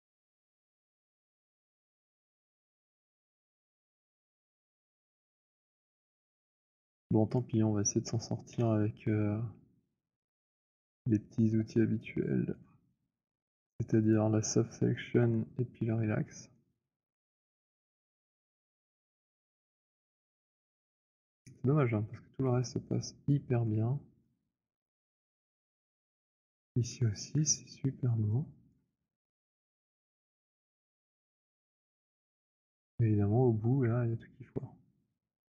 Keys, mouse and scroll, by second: 2.3 alt+click, 2.4 alt+click, 3.3 alt+middle click, 5.4 F7, 7.4 click, 8.4 Delete, 12.5 scroll, 14.1 click, 15.0 h, 17.6 scroll, 19.5 alt+click, 23.1 middle click, 23.1 alt+click, 24.0 alt+middle click, 24.2 alt+middle click, 24.3 alt+click, 25.0 alt+click, 25.2 click, 26.3 alt+click, 28.7 alt+click, 28.9-29.5 scroll, 29.5 click, 30.6 middle click, 31.1 alt+click, 31.9 alt+middle click, 32.0 alt+middle click, 32.4 alt+middle click, 32.7 alt+middle click.